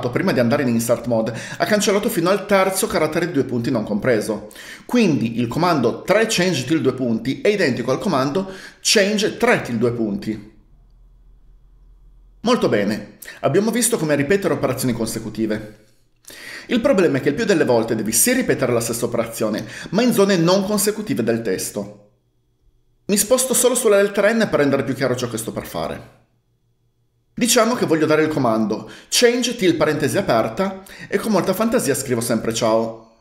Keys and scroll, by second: 24.0-24.8 typing, 29.2-30.7 typing, 32.0-33.1 typing.